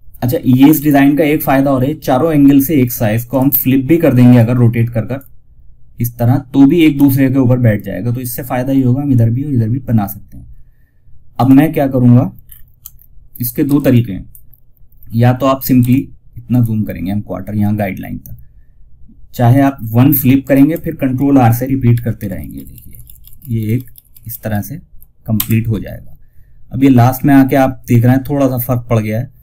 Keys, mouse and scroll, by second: 0.1-1.9 scroll up 1, 2.6-9.6 drag, 9.6 scroll down 1, 10.6 click, 11.7 ctrl+scroll down 1, 12.2 scroll down 1, 12.9 F2, 13.2 click, 14.5 scroll down 1, 15.1 F2, 15.2-18.8 drag, 17.5 typing, 18.8 click, 19.7 ctrl+right click, 21.2 ctrl+r, 26.7 typing, 28.9 click.